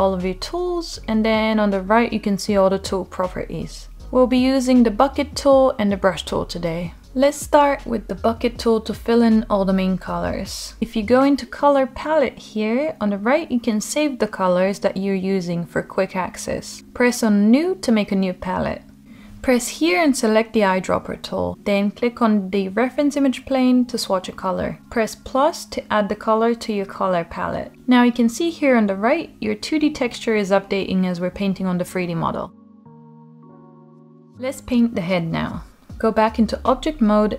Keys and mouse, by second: 1.2 click, 11.6 click, 14.6-19.6 drag, 14.7 t, 26.8 click, 36.0 Tab, 36.9 click.